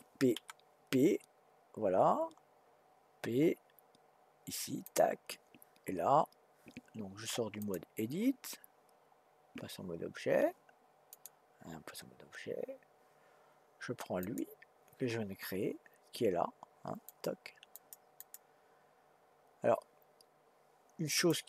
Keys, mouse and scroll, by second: 0.3 p, 7.6-10.7 drag, 14.2 click, 17.0 click, 17.7 click, 18.2 click, 21.1 click.